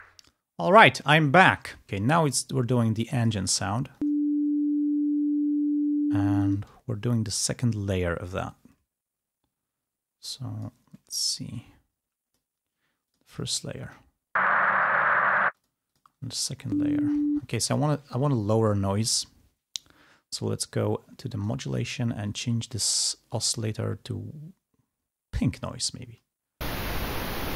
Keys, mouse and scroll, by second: 2.0 scroll down 2, 2.7 ctrl+scroll down 2, 3.3 click, 3.6 ctrl+space, 3.8 ctrl+scroll up 2, 6.7 space, 8.7 middle click, 10.3 click, 11.0 middle click, 11.6-12.7 drag, 13.2 click, 13.9 space, 15.4 space, 15.7 click, 16.0 click, 16.3 space, 17.3 space, 17.7 click, 21.4 click, 22.4 click, 23.6 click, 25.4 click, 26.2 space.